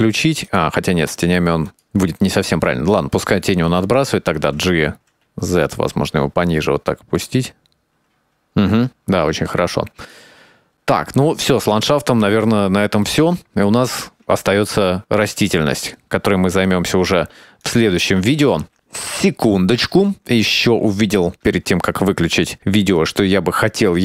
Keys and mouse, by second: 0.8 click, 2.0 click, 2.8 click, 4.6 g, 4.7 z, 5.3 right click, 6.0 g, 7.8-10.9 drag, 12.1 shift+middle click, 13.1-14.1 drag, 14.3-15.2 ctrl+middle drag, 15.4-16.5 shift+middle drag, 16.9 n, 18.6 ctrl+s, 19.0-21.7 shift+middle drag, 23.6 right click.